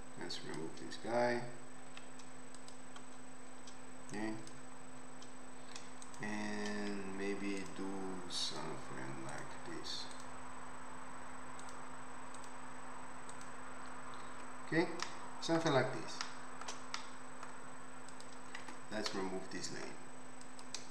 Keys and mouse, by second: 1.9 x, 6.1-7.6 shift+drag, 7.7 ctrl+click, 8.6 ctrl+click, 9.4 ctrl+click, 10.2-11.6 ctrl+drag, 11.7 ctrl+click, 12.5-18.2 ctrl+drag, 13.3 ctrl+middle click, 13.3 ctrl+right click, 14.4 Tab, 18.2-20.4 middle drag, 18.6 Tab, 20.4-20.9 drag.